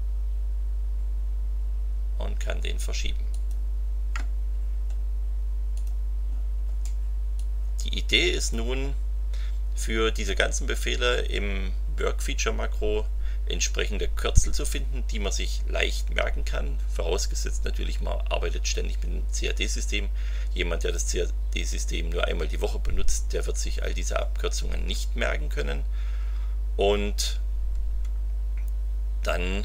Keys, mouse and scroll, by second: 3.3 click, 5.7 click, 7.3-8.7 drag, 12.5-13.6 scroll up 3, 23.8-24.1 scroll down 1, 24.5-24.8 scroll down 2, 29.4 scroll down 2.